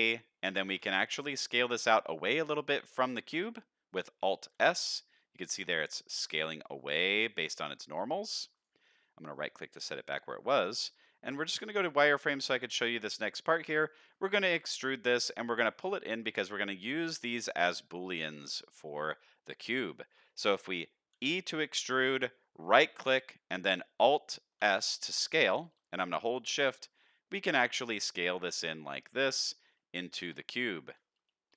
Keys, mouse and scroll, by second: 0.0 middle click, 0.0-0.4 scroll up 2, 0.6 alt+s, 4.6 alt+s, 8.9 middle click, 9.3-10.4 scroll down 2, 9.6-10.7 middle drag, 11.9 scroll up 1, 11.9 z, 12.2-13.7 middle drag, 13.9 shift+middle click, 14.8 middle click, 16.2 middle click, 17.8 middle click, 19.9 shift+middle click, 21.1 e, 24.6 alt+s, 30.5 z, 31.3 shift+middle click.